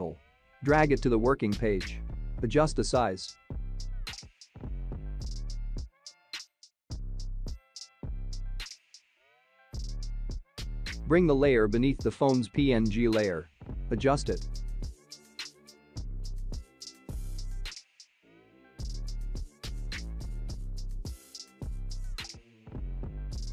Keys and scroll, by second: 3.5 ctrl+t.